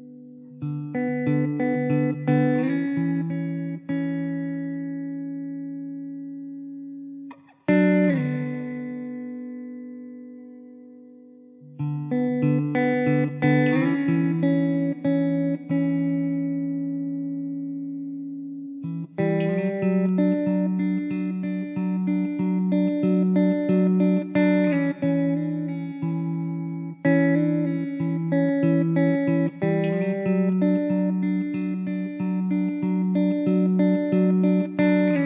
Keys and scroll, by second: 1.0 alt+z, 5.8 shift+d, 6.5 `, 17.2 ctrl+j, 18.9 ctrl+s, 21.4 KP_0, 22.2 s, 23.5 ctrl+z, 25.4 ctrl+j, 27.2 s, 27.7 ctrl+z, 28.7 Tab, 29.2 3, 30.5 Tab, 30.6 Tab, 31.6 3, 31.9 alt+z.